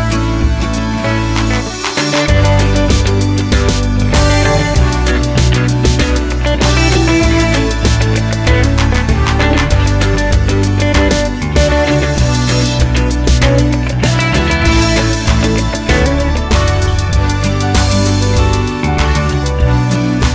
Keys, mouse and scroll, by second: 0.6-1.0 scroll down 1, 1.0 click, 3.6-4.3 middle drag, 4.3 click, 5.4 click, 6.1-8.1 middle drag, 8.1 click, 8.9 click, 9.1-10.6 middle drag, 10.6 click, 10.7 middle click, 12.5 click, 12.6 middle click, 13.4 click, 14.6 click, 14.9-16.9 middle drag, 16.9 click.